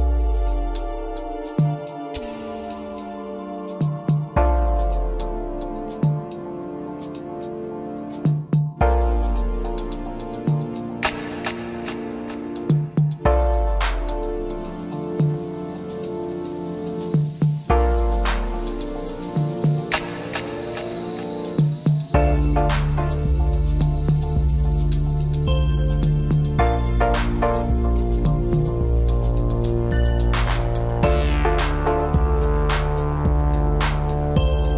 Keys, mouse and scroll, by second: 0.4 ctrl+r, 2.9 ctrl+r, 6.6 shift+click, 7.8 s, 14.7 click, 15.5 click, 16.8 shift+click, 17.7 g, 21.8 ctrl+z, 23.0 e, 25.8-28.2 middle drag, 28.2-28.9 scroll up 1, 28.9-30.1 middle drag, 30.1-31.4 scroll down 1, 31.4 KP_1, 32.3 Tab, 33.1 g.